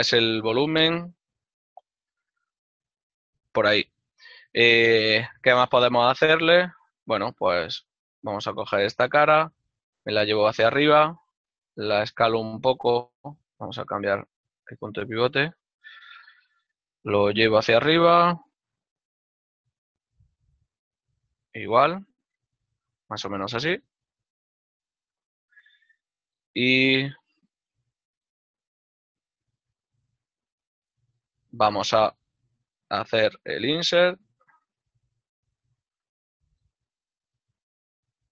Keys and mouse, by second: 2.3 click, 6.2 Tab, 8.4 right click, 9.6 z, 23.2 right click, 26.2 right click, 26.8 z, 28.7 click, 29.9 right click, 30.3 z, 30.6 click, 33.3 middle click, 34.6 |.